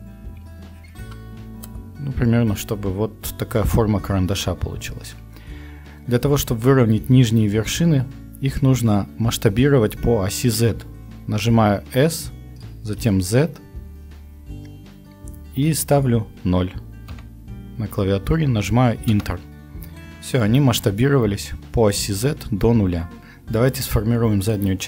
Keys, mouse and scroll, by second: 11.9 s, 19.4 Return.